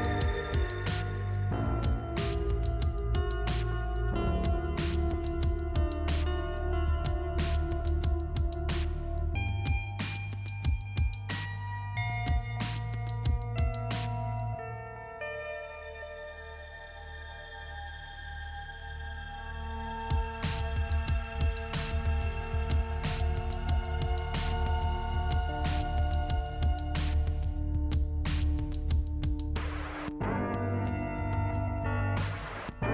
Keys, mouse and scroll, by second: 1.2 click, 3.0 click, 4.7 click, 8.9 middle click, 11.2-11.5 scroll up 1, 12.6 click, 13.3 click, 15.7-16.2 scroll down 1, 16.2-17.3 scroll up 1, 17.4 middle click, 18.5 click, 18.8 scroll up 3, 20.6 click, 25.6 click, 27.7 click, 29.8 click, 31.4 click, 31.8 click, 32.4 click.